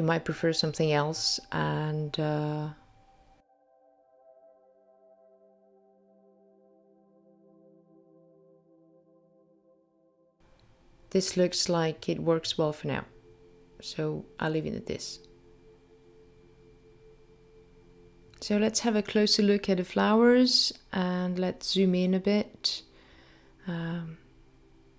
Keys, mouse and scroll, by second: 0.5 click, 3.6 click, 5.3 click, 7.7 click, 9.5 click, 10.5 click, 11.4 click, 12.4 click, 13.3 click, 18.2 middle click.